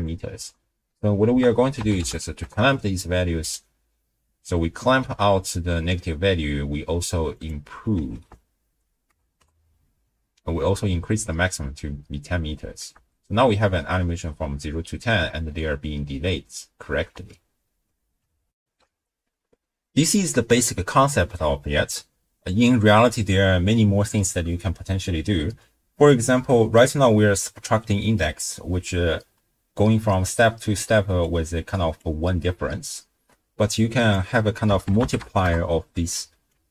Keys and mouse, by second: 0.0-0.4 typing, 1.3 ctrl+a, 7.3-9.4 drag, 8.3 0, 13.0 shift+space, 15.5 space, 17.1 shift+space, 18.6 ctrl+alt+shift+w, 18.8 ctrl+alt+shift+q, 24.9 space, 25.5 space, 30.8-32.4 d, 31.2 click, 33.8-36.1 drag, 36.5 alt+click.